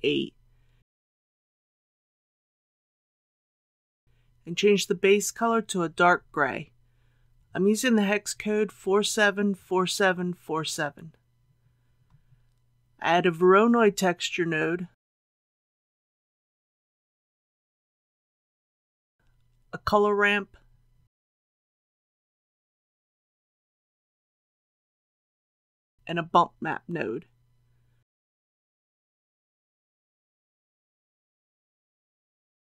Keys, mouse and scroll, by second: 0.2 KP_Decimal, 0.5 KP_8, 5.0-7.4 drag, 8.4-9.4 typing, 12.1 scroll up 1, 13.3 shift+a, 16.5 click, 19.3 shift+a, 21.8 click, 27.5 shift+a, 31.7-32.6 drag.